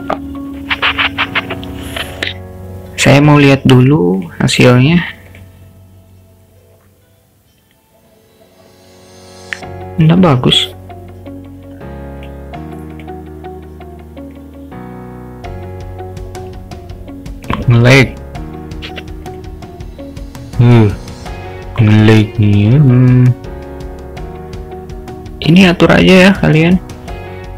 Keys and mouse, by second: 4.3 click, 4.9-5.8 drag, 10.3-10.7 drag, 12.2 click, 13.0 click, 18.9 o, 21.8 click, 22.3 middle click.